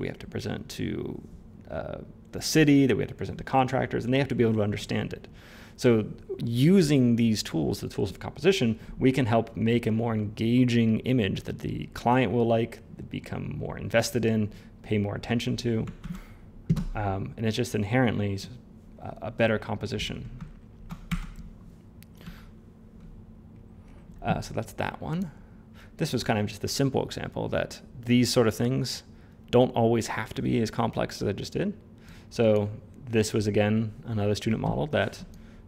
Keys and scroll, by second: 15.9 ctrl+z, 22.1 f.